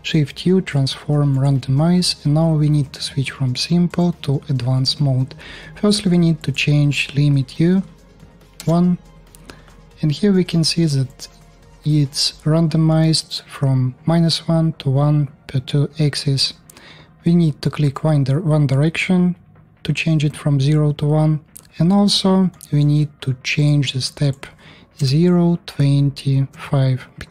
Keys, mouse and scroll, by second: 1.9-3.7 drag, 1.9 shift+u, 3.7-6.2 middle drag, 6.2-17.6 drag, 17.6-23.3 middle drag, 23.3-27.3 drag.